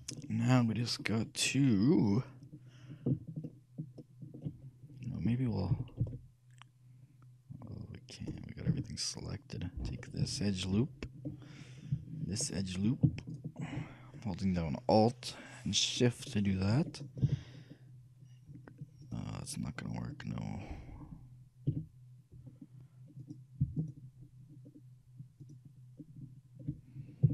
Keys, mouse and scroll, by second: 0.7 middle click, 1.2-2.8 scroll up 1, 3.6-5.4 shift+middle drag, 5.8 shift+g, 8.8 a, 10.4-12.4 right drag, 12.5-15.4 alt+right drag, 17.4 g, 21.8 a, 23.3-27.3 right drag.